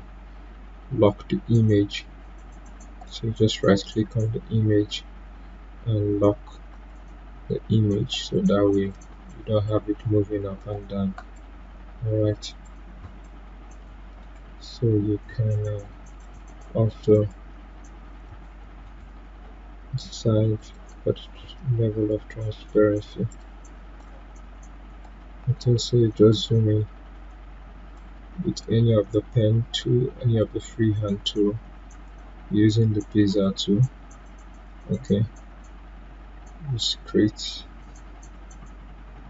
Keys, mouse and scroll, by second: 3.0 right click, 6.7 click, 14.2 right click, 16.2 click, 18.8 right click, 20.5-30.5 drag, 31.9 click, 36.6 click, 36.7-39.2 drag.